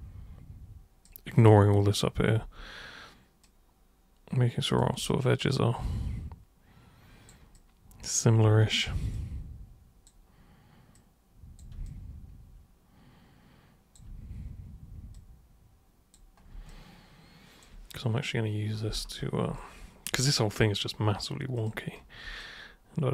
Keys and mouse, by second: 2.4 super+w, 3.4 super+click, 5.0-7.3 alt+super+drag, 7.5 alt+super+click, 8.4 alt+super+c, 9.1 alt+super+click, 10.9 alt+super+click, 11.9-13.9 alt+super+drag, 15.1 super+click, 16.7-17.6 alt+super+drag, 19.5 alt+super+click, 21.5 super+click, 22.4-23.1 alt+drag.